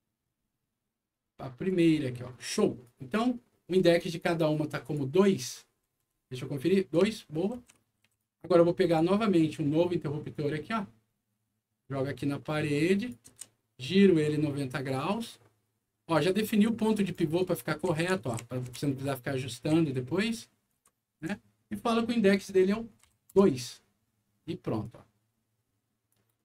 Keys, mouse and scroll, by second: 0.1-0.6 scroll up 2, 1.1 scroll up 2, 1.6 click, 2.3 right click, 3.6-4.1 scroll up 4, 4.8 click, 5.3-5.9 scroll up 2, 6.9-8.1 right drag, 7.0 a, 7.7 s, 8.0 w, 8.8 click, 10.3-13.0 drag, 13.3 e, 14.9-17.1 drag, 17.3-19.2 right drag, 17.5-19.5 typing, 20.6 right click, 20.7 a, 21.2 d, 22.3 click, 23.0 2, 23.3 Return, 24.8-26.1 drag, 26.3-26.4 typing, 26.3 right click.